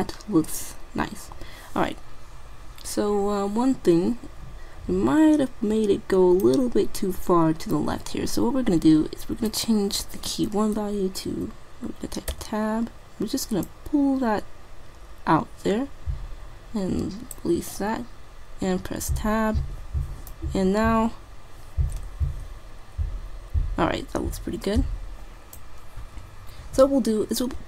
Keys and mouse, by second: 9.5-11.3 drag, 12.4 Tab, 13.7-15.5 drag, 19.0 Tab, 20.4 click, 24.6-25.6 typing.